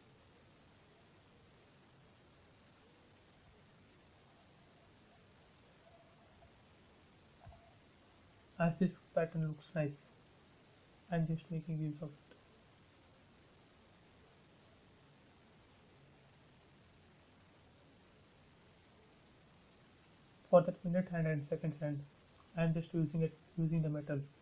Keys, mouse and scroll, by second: 4.1 space, 5.6 click, 7.9 click, 9.4-10.1 scroll down 1, 10.1-11.9 scroll up 1, 11.9-14.1 scroll down 1, 14.3-14.6 scroll up 1, 15.5 click, 21.7 click, 22.4 scroll up 1, 23.3 click.